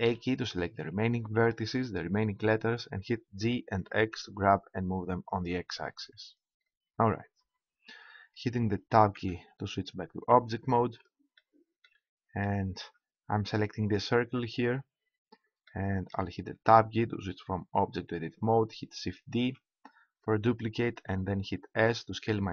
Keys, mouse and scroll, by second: 0.1 a, 3.2 g, 5.4-6.8 drag, 9.1 Tab, 13.9-15.6 right drag, 15.6-16.6 middle drag, 16.6 Tab, 19.4 shift+d.